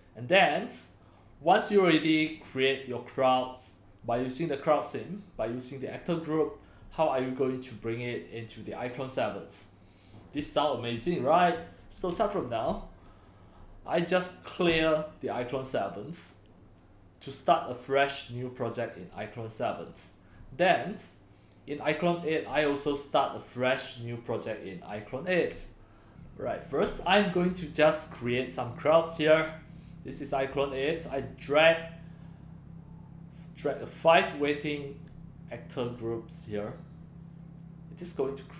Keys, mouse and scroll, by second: 1.2-7.5 drag, 10.4 click, 14.7 click, 15.3-15.9 drag, 16.1 click, 19.8 click, 20.5-24.8 drag, 25.2-30.2 drag, 31.0-32.5 drag, 32.9-38.5 drag.